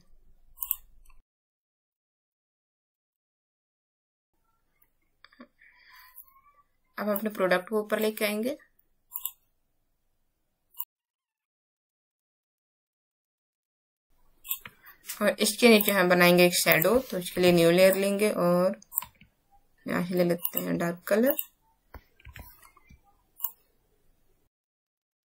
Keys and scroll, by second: 13.9 space, 17.4 b, 22.2 v.